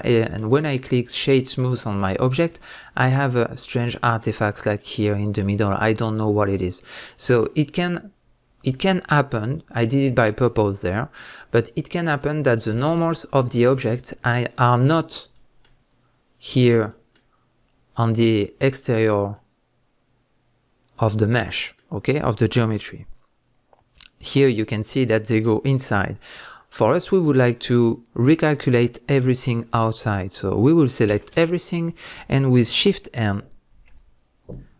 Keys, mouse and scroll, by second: 13.1-13.5 scroll up 2, 23.1 scroll down 1, 23.5-34.7 middle drag, 23.5-24.3 scroll up 2, 24.3-25.1 scroll up 1, 29.9 scroll down 2, 31.0 a, 33.8 shift+n.